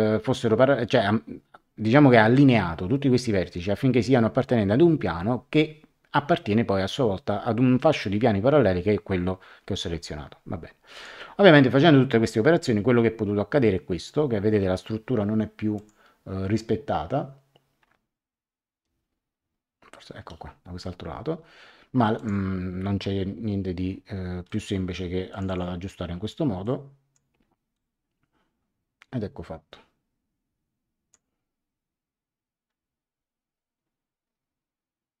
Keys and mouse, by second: 10.9 click, 15.7 click, 22.1 click, 24.4 click, 26.6 click, 27.7 click.